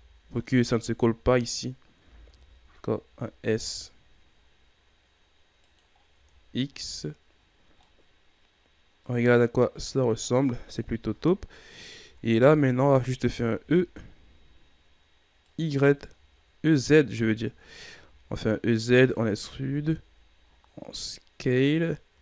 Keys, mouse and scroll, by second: 0.3 alt+right click, 2.0 s, 5.9 scroll down 3, 6.6-7.3 scroll down 4, 7.3-7.8 scroll up 7, 7.8-10.7 middle drag, 10.7 KP_3, 11.6-11.9 scroll up 1, 11.9 Tab, 13.5 e, 15.9-16.3 shift+scroll down 4, 16.3-17.4 scroll up 1, 17.4-17.9 ctrl+scroll up 1, 17.9 e, 19.5 s, 22.1 e.